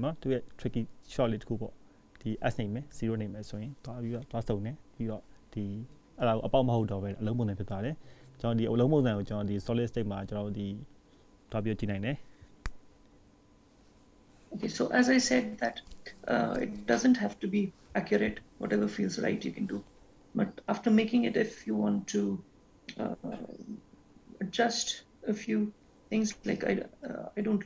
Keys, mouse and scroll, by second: 8.4-9.4 scroll down 6, 9.4-9.9 scroll down 4, 10.1-11.0 scroll up 8, 11.0-12.3 scroll up 1.